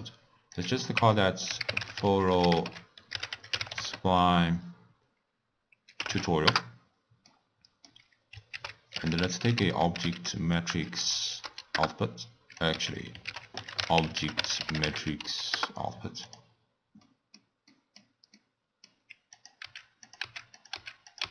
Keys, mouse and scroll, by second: 0.5-2.1 drag, 2.1 l, 7.2-8.5 middle drag, 8.5 ctrl+a, 12.9 x, 13.2 ctrl+a, 16.6-17.0 scroll down 3, 17.0-19.3 middle drag, 19.3 click, 19.8 x, 20.0 click, 20.4 x, 20.5 click, 20.9 x, 21.1 click.